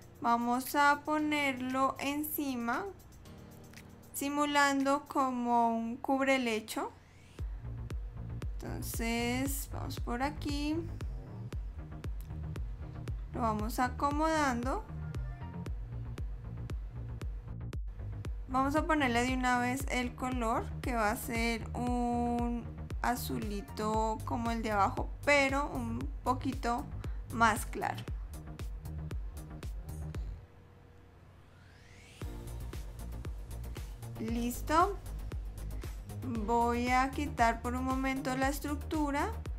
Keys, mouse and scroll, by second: 3.9 click, 9.9 click, 12.2 s, 18.9 click, 21.0 click, 27.1 click, 35.8 click, 38.1 click, 39.1 KP_7.